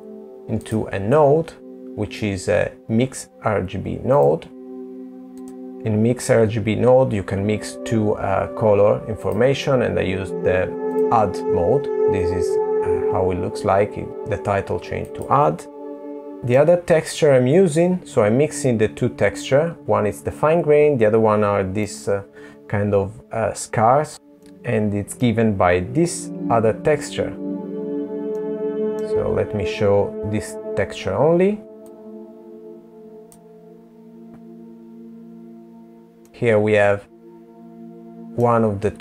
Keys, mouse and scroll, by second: 7.1 click, 12.9 click, 13.9 Delete, 16.0 middle click, 19.8 middle click, 24.1 middle click, 26.4 middle click, 27.4-29.4 scroll down 2, 29.9 click, 34.2 middle click.